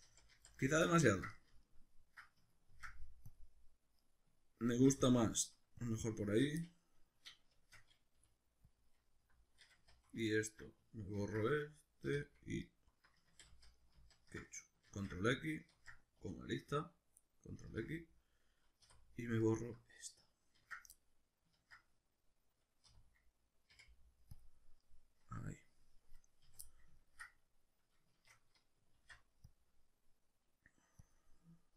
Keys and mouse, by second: 0.1 ctrl+z, 1.3 middle click, 2.7 ctrl+r, 4.1 right click, 4.7 ctrl+r, 5.9 click, 6.6 middle click, 7.5 shift+Tab, 8.2 g, 8.8 click, 10.3 alt+right click, 11.2 ctrl+x, 12.0 3, 12.6 alt+right click, 13.2 ctrl+z, 14.9 ctrl+x, 15.7 ctrl+z, 16.2 2, 17.6 ctrl+x, 18.8 3, 19.4 alt+right click, 20.6 ctrl+x, 21.6 ctrl+z, 22.9 3, 23.7 x, 24.8-25.7 middle drag, 26.5 a, 26.7 middle click, 28.1 shift+Tab, 29.0 alt+e, 31.1 click, 31.5-31.7 middle drag.